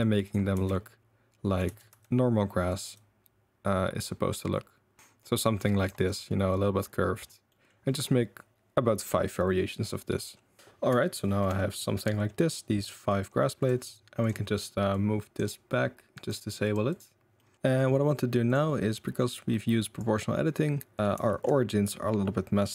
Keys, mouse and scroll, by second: 0.5 Tab, 0.7-1.5 middle drag, 1.6 Tab, 1.9 r, 2.8 g, 5.1 z, 5.3-6.2 middle drag, 6.9 middle drag, 7.5 middle drag, 10.9 shift+middle click, 11.2 shift+middle drag, 11.5 middle drag, 12.0-12.4 middle drag, 12.8 middle drag, 13.6 drag, 14.9 click, 16.1 click, 16.6 click, 16.9 click, 17.3 middle drag, 17.6 middle click, 19.0 middle drag, 19.9 click, 20.9 click, 21.3 shift+drag, 21.8-22.2 drag, 22.2-22.6 middle drag.